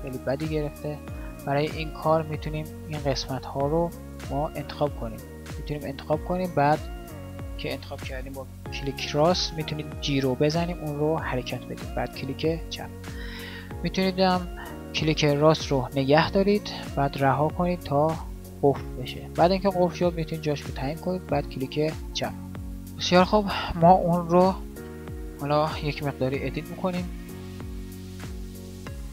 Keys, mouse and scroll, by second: 9.9 g.